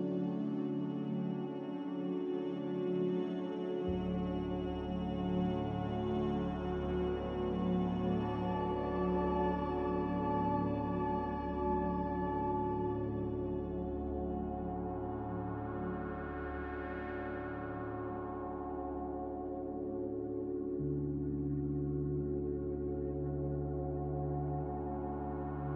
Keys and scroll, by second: 8.8 ctrl+w, 12.0 g, 12.7 Escape, 16.5 z, 16.5 g, 17.7 typing, 18.2 Return, 21.6 r, 22.6 Escape, 22.7 Escape, 23.2 Escape, 23.2 r.